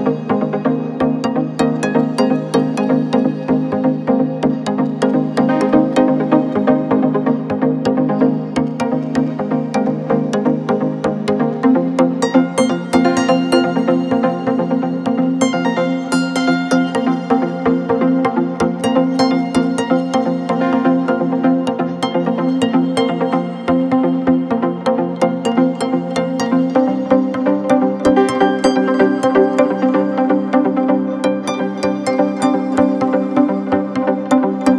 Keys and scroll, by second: 0.7 Delete, 6.0 Delete, 7.4 ], 9.1 ], 12.1 4, 27.4 2, 29.6 f, 32.7 ].